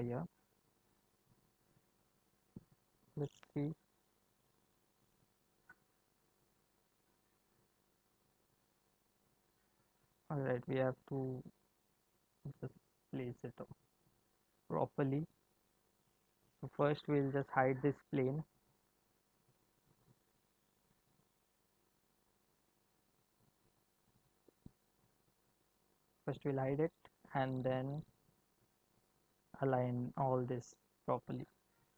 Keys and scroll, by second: 3.1 space, 9.4 space.